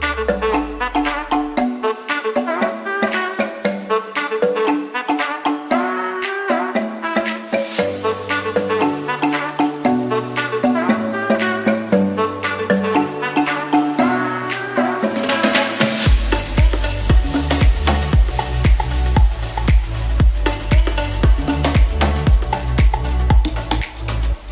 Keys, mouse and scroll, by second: 8.4 ctrl+z, 11.9 ctrl+b.